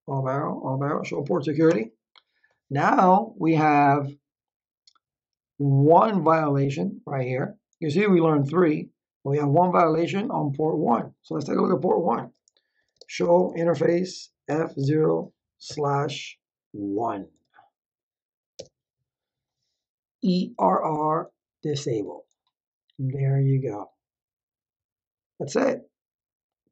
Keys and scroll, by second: 1.6 Return, 12.5-15.6 typing, 17.3 1, 18.5 Return.